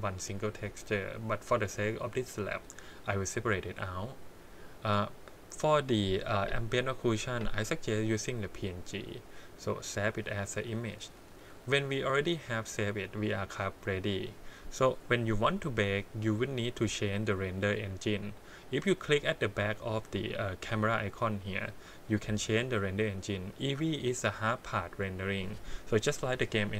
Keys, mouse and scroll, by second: 12.4 click, 14.3 click, 16.9 click, 22.4-26.7 drag.